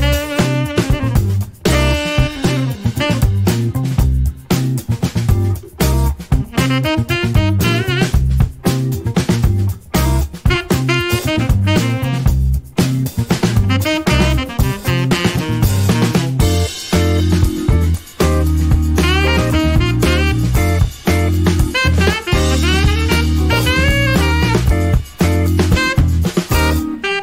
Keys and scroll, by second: 17.6-18.8 typing, 20.0 Escape, 20.6 shift+a.